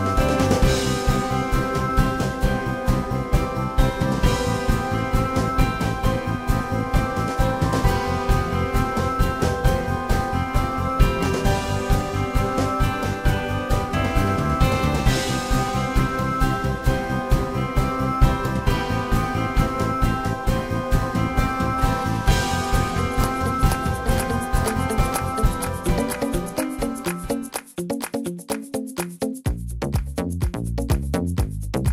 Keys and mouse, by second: 1.4 y, 4.5-5.3 drag, 5.4-24.0 drag, 21.5 s, 23.8 shift+f, 26.6 y, 30.1-31.9 drag, 30.6 s.